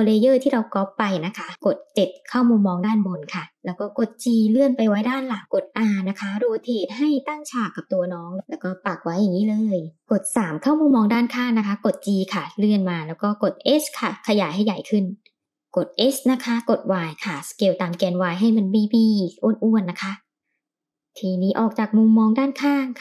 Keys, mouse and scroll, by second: 1.3 KP_7, 2.9 g, 5.2 r, 7.0 g, 9.2 KP_3, 11.0 g, 12.1 s, 13.4 g, 15.7 s, 19.4 g, 21.3-21.8 middle drag.